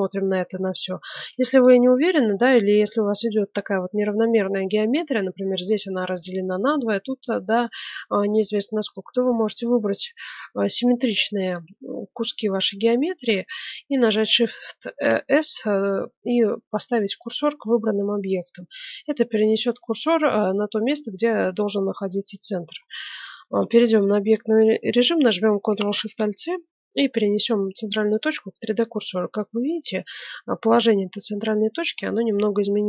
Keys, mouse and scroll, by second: 0.1-3.9 middle drag, 1.1 ctrl+Tab, 8.7-13.1 right drag, 14.1 shift+s, 18.5-23.6 middle drag, 23.2 Tab, 29.1-30.7 middle drag, 30.8-32.8 middle drag.